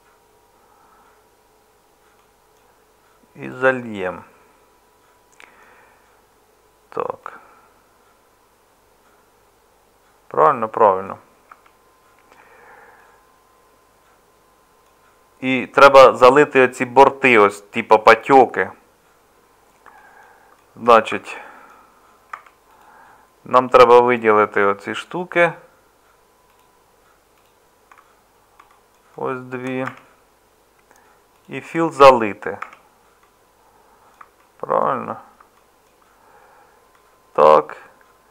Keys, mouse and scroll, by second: 11.5 Tab, 21.1 Tab, 22.3 Tab, 29.9 Tab, 32.0 Tab.